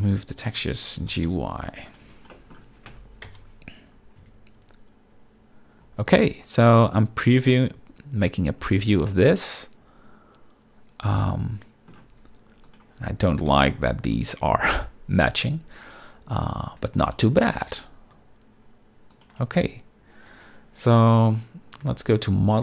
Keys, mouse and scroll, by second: 0.4 right click, 1.1 g, 1.3 y, 1.9 click, 2.0 Tab, 2.3 middle drag, 3.2 KP_0, 4.2 z, 9.1-11.9 shift+middle drag, 12.6 click, 13.4 g, 14.1 shift+click, 17.0 click, 17.3 g, 19.1 shift+click, 21.8 z.